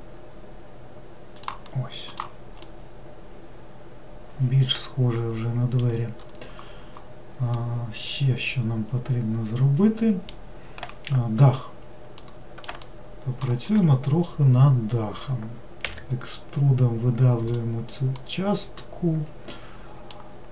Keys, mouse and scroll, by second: 2.1 click, 2.6-5.8 middle drag, 7.5-10.5 middle drag, 12.2-13.6 middle drag, 13.6 click, 15.8 e, 18.1-20.5 middle drag.